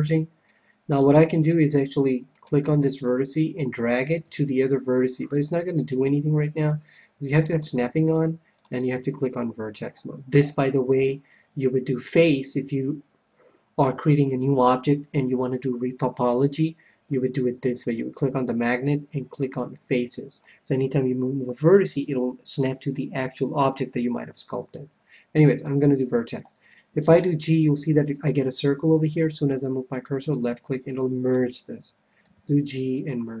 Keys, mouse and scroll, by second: 0.5-2.7 middle drag, 2.3-4.1 right drag, 4.3 g, 5.9-7.6 right drag, 7.6-10.3 drag, 19.3-21.0 drag, 27.0 g, 30.3-32.0 drag, 31.2-33.0 right drag, 32.2 g, 33.0-33.4 drag, 33.0 middle click.